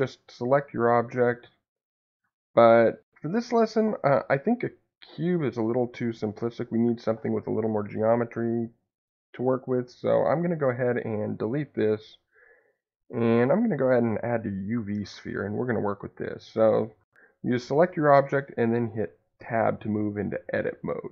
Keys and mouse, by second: 10.7 x, 12.2 shift+a, 19.3 Tab.